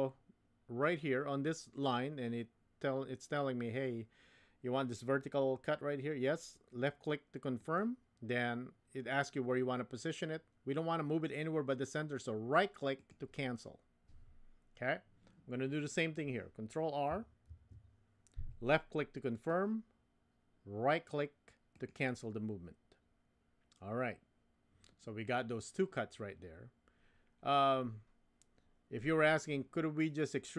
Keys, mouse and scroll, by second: 17.5 ctrl+r.